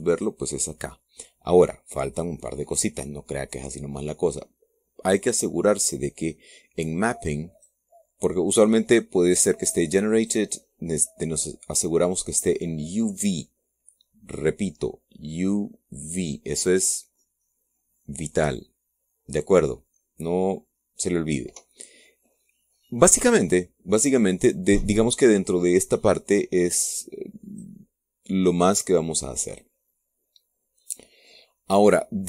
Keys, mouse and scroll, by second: 0.1 click, 0.9-2.9 drag, 2.9-3.7 scroll down 1, 3.7 click, 4.3 scroll down 1, 4.6 click, 8.2 click, 10.1 click, 10.9 click, 13.0-15.8 drag, 22.4-22.9 scroll up 1, 23.1-23.4 scroll up 1, 23.9-24.3 scroll up 1, 24.7-25.1 scroll up 1, 28.2 click.